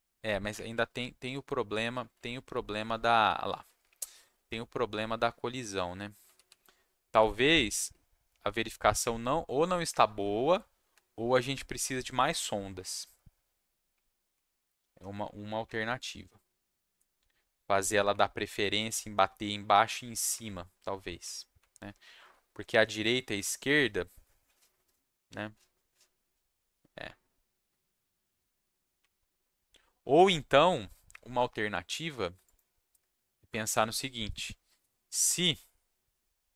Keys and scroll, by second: 0.5 Up, 0.9 s, 2.1 w, 3.6 s, 4.4 Down, 4.9 Down, 6.0-7.3 typing, 9.0 Up, 10.1 Down, 10.9 Down, 11.5 Up, 13.9 Up, 14.5 Down, 15.1 Up, 16.4 Down, 17.6 Up, 18.4 Down, 19.2 Down, 19.6 Down, 20.3 Up, 21.2 Up, 22.6 s.